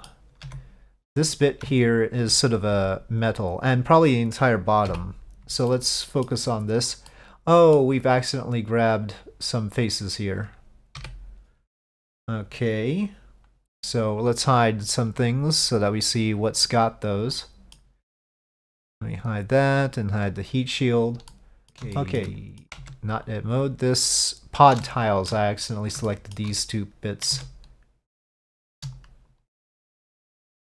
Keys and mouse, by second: 0.5 Tab, 1.8 alt+click, 5.0 KP_Divide, 5.8 middle click, 7.2 middle click, 11.1 KP_Divide, 16.7 click, 17.4 middle click, 20.4 click, 21.4 middle click, 21.9-22.7 shift+middle drag, 22.9 Tab, 23.4-24.9 drag, 24.9 shift+middle click, 26.1 shift+middle click, 27.4 Tab, 28.5 click, 29.0-30.3 shift+drag.